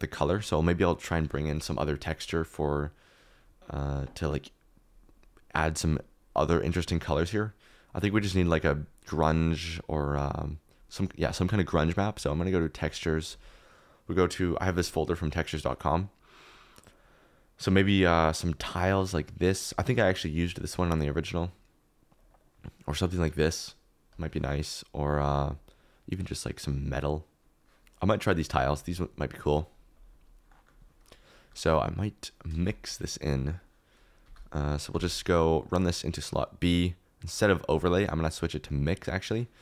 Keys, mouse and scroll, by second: 32.5 shift+d, 34.2 g, 34.9 g.